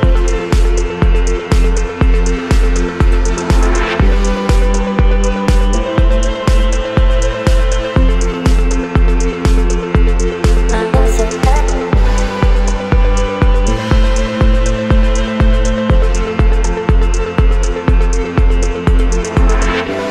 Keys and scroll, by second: 1.2 Delete, 3.8 Delete, 5.6 Delete, 6.1 space, 8.4 Delete, 10.9 Delete, 14.8 Delete, 15.6 space, 20.0 space.